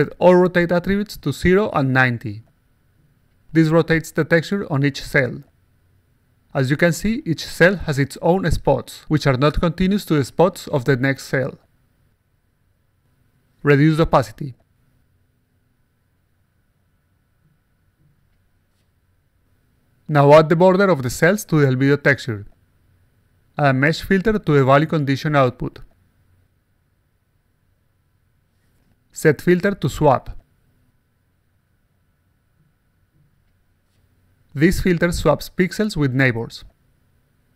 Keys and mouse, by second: 0.1 click, 1.1-4.2 typing, 6.2 alt+right click, 6.5-7.6 alt+drag, 6.5-7.6 alt+right drag, 8.3 alt+right click, 8.7-9.8 alt+drag, 10.2-10.7 alt+drag, 10.8-11.5 alt+right drag, 11.6-12.0 alt+drag, 13.5 click, 14.5 click, 16.2 click, 16.7 alt+click, 17.0 alt+middle click, 17.6-18.8 drag, 19.7 click, 23.2 click, 24.5 click, 25.7 click, 26.5 click, 27.4 click, 27.8 click, 28.0 click, 28.5 click, 29.3 click, 30.5 click, 32.5 click, 34.4-36.4 alt+drag.